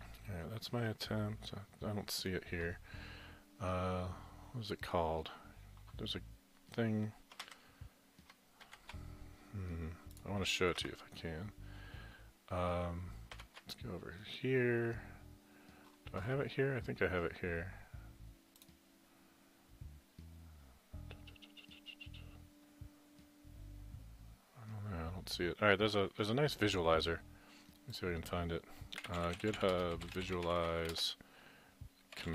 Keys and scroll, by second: 7.4 alt+Tab, 8.7 alt+shift+Tab, 10.8 alt+Tab, 13.3 alt+Tab, 28.7-32.3 typing.